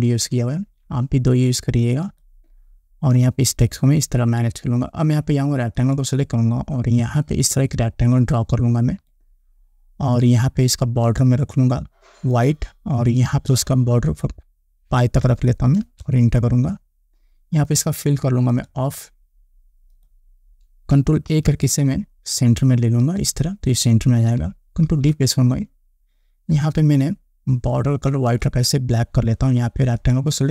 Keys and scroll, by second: 15.7 5, 16.3 Return, 21.7 ctrl+a, 25.3 ctrl+d.